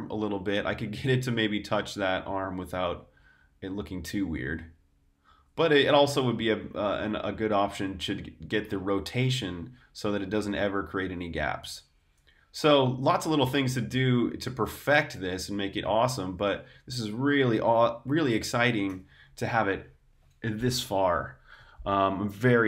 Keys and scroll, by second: 16.5 super+Tab, 18.8 super+r, 19.1-19.7 typing, 19.3 super+h, 19.9 super+h.